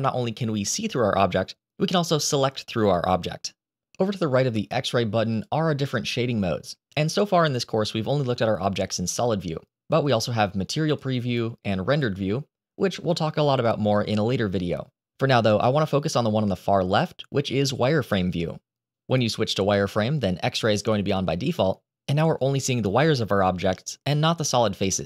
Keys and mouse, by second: 1.4 click, 5.2 click, 11.8 click, 17.9 click.